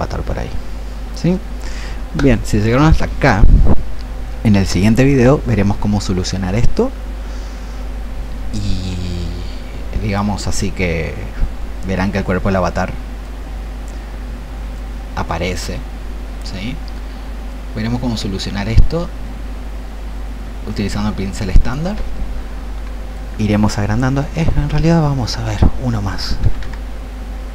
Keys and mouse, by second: 26.5 KP_1.